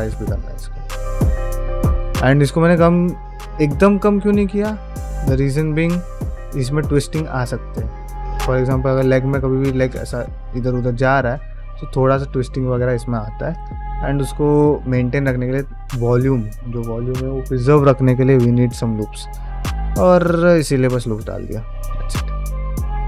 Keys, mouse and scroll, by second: 0.9 ctrl+Tab, 1.4-1.7 scroll down 2, 1.7 alt+z, 2.0-2.3 middle drag, 2.5 alt+z, 2.5 alt+scroll down 1, 3.5 KP_Divide, 3.9-4.4 middle drag, 4.8 scroll up 1, 5.3 scroll down 1, 5.5 shift+middle click, 6.0 click, 6.4 middle drag, 7.1-7.5 middle drag, 7.5 scroll down 1, 10.8-11.2 middle drag, 12.3-13.1 middle drag, 13.4 click, 13.7-14.4 middle drag, 18.8 middle drag, 19.4 shift+middle drag, 19.6-20.3 scroll down 2, 19.9-20.3 middle drag, 20.5 click, 20.8 shift+middle drag, 21.2-21.7 middle drag, 22.0 shift+middle drag, 22.3-23.0 middle drag.